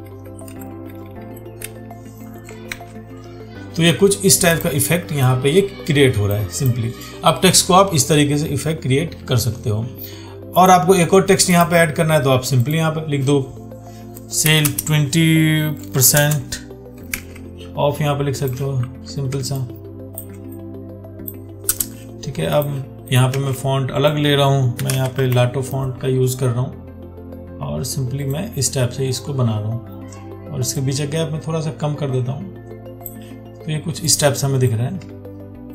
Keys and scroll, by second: 2.9 ctrl+d, 17.4 ctrl+a, 23.6 ctrl+a.